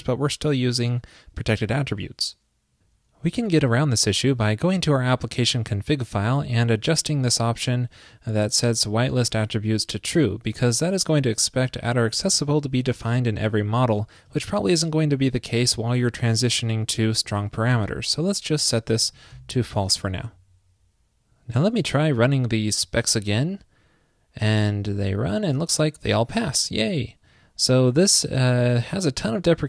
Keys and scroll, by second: 19.7 super+s.